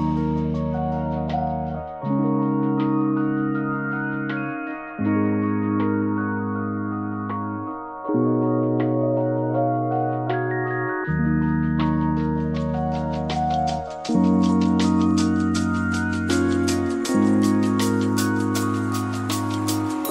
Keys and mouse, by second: 0.2 ctrl+a, 0.8 Tab, 1.0 middle click, 1.7 click, 2.8 middle click, 3.1 shift+middle click, 3.9 e, 6.9 s, 10.0 Tab, 10.3 middle click, 10.5 ctrl+a, 11.3 Tab, 11.5 a, 11.9 q, 12.9 Tab, 13.3 middle click, 14.2 click, 14.7 click, 15.0-16.5 shift+drag, 16.8 click, 18.8 click.